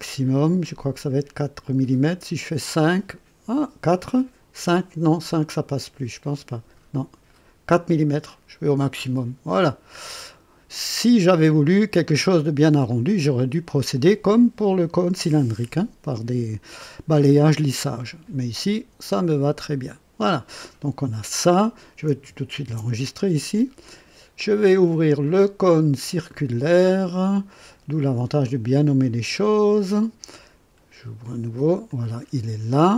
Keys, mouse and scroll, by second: 0.0 scroll up 1, 2.2 scroll up 1, 5.8 scroll up 1, 7.0 scroll down 1, 9.0 click, 10.1-11.2 drag, 12.9 click, 17.8-20.7 drag, 22.6 ctrl+s, 24.7 click, 27.4 click, 28.4-31.1 drag, 31.8-32.9 drag.